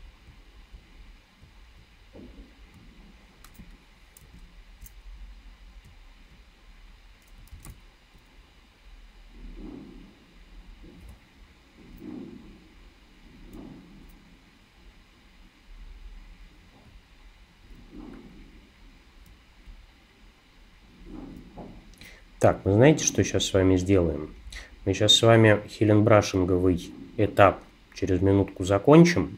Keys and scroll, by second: 3.6 space, 4.2 alt+space, 7.5 super+r.